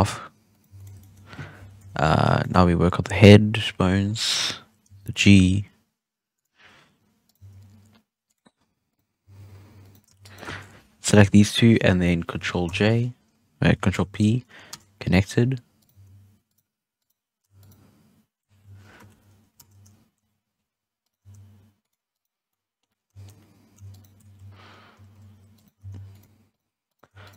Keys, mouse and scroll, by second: 0.4 right click, 0.6 x, 0.9-1.7 shift+middle drag, 1.7 KP_3, 2.3 shift+middle click, 2.4-3.6 scroll up 6, 3.6 l, 4.1-4.8 scroll down 2, 4.8 g, 6.5-7.2 scroll up 2, 7.2 right click, 7.3 g, 8.8 right click, 9.2 g, 10.1 shift+right click, 12.6 ctrl+j, 13.9 ctrl+p, 15.7 right click, 15.9 g, 16.9 right click, 17.5 shift+right click, 18.9 ctrl+p, 21.0 right click, 21.1 g, 22.1 right click, 22.4 scroll down 1, 22.4-22.9 middle drag, 22.9 scroll up 1, 23.0-23.8 shift+middle drag, 23.8 shift+right click, 24.9 ctrl+j, 25.5 right click, 25.7 x, 26.4 right click, 26.8 right click, 27.2 shift+right click.